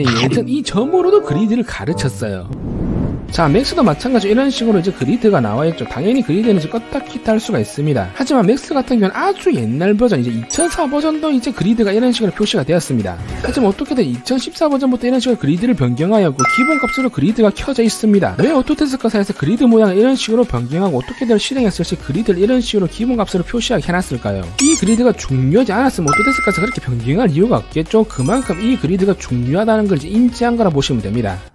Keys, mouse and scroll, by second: 4.6 click, 5.2 alt+w, 5.7 middle click, 6.4 scroll down 1, 6.9 g, 7.2 g.